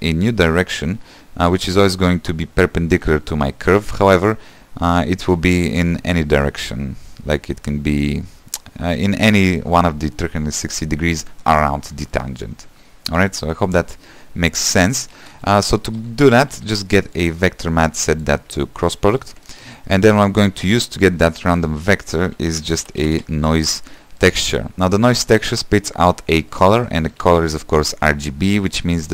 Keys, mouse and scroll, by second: 17.2 q, 19.2-24.3 drag, 24.3 shift+a, 28.5-29.1 drag.